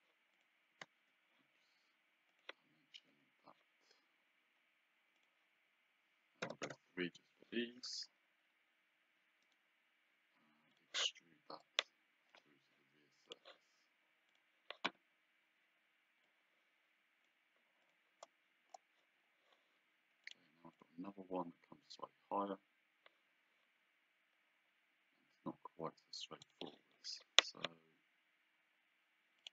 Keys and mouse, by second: 0.8 Escape, 2.3 click, 3.1 d, 5.2 click, 6.4 KP_3, 6.7 Return, 6.7 KP_Enter, 7.3 Escape, 9.4 right click, 10.7 click, 13.3 click, 16.3 click, 17.8 click, 20.3 click, 26.4 click, 29.4 click.